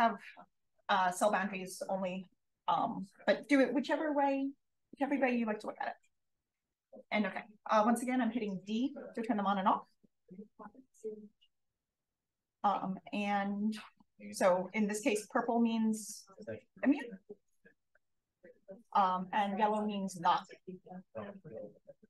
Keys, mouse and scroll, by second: 3.2 d, 4.3 d, 5.1 d, 6.7 d, 9.1 d, 11.1 space, 12.8-13.4 drag, 13.7 d, 14.4 d, 15.2-15.9 scroll up 2, 15.5 d, 15.9-16.5 drag, 16.8 d, 16.9-17.4 drag, 17.7 d, 17.8 click, 18.8 d, 20.0-20.5 drag, 20.6 d, 21.0-21.5 drag.